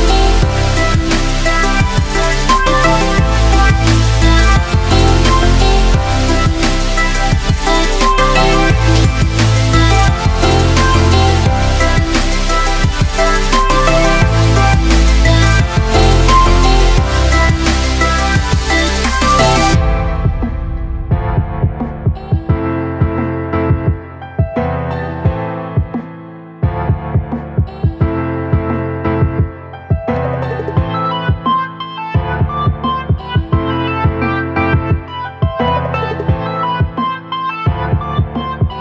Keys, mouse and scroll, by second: 2.1 click, 3.6 alt+space, 4.0 alt+click, 5.9 click, 6.1 space, 8.0 ctrl+click, 11.1-22.5 drag, 22.9 ctrl+t, 23.2 alt+space, 23.4 alt+click, 23.7 alt+space, 24.5 alt+click, 24.9 alt+space, 25.3 alt+click, 26.7-29.8 alt+drag, 29.8 space, 31.8-33.8 alt+drag, 34.4 space, 34.5 click, 37.0 ctrl+click, 37.5 right click.